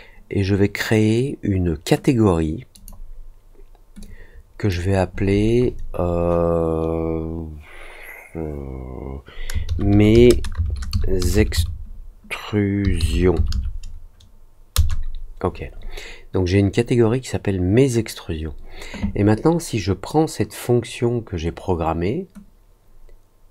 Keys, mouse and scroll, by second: 2.7 click, 3.9 click.